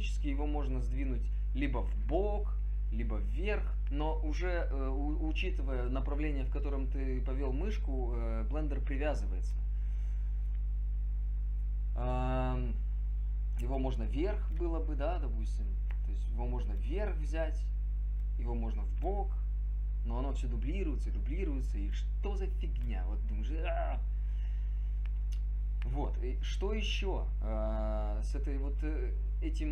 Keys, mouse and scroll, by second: 6.5 click, 7.0-8.3 drag, 15.7 click, 17.6 click, 19.0 click.